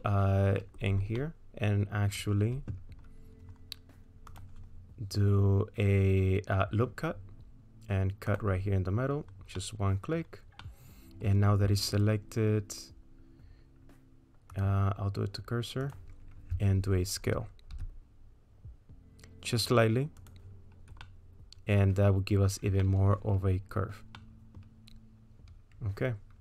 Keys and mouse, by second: 0.0 middle click, 1.2 middle click, 4.3 click, 8.3 click, 9.6 middle click, 10.7 middle click, 14.6-16.0 drag, 17.8 s, 21.1 middle click, 22.9 middle click, 24.2 middle click.